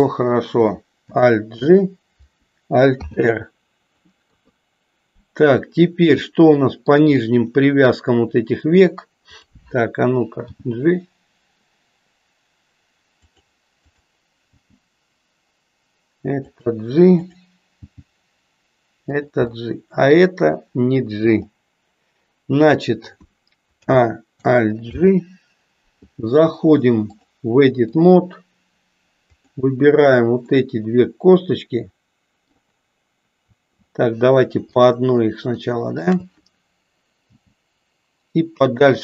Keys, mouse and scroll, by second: 1.5 alt+g, 2.9 alt+r, 4.1 KP_3, 6.3 middle click, 7.4 middle click, 9.3 click, 10.4 g, 14.7 g, 17.2 click, 17.9 g, 19.6 middle click, 21.3 click, 23.8 a, 24.9 alt+g, 27.2 click, 29.3 click, 30.5-32.5 middle drag, 34.8-36.0 shift+middle drag, 37.3 g.